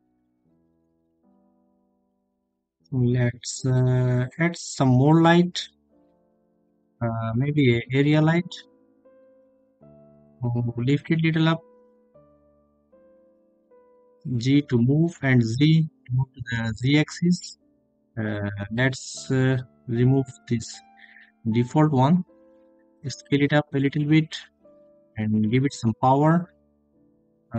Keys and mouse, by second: 7.0 g, 7.6 z, 9.3 click, 11.6 g, 11.9 z, 12.7 click, 15.5 click, 16.4 click, 19.5 s, 21.7-22.1 drag, 23.3 click, 24.4-27.5 drag, 27.4 0.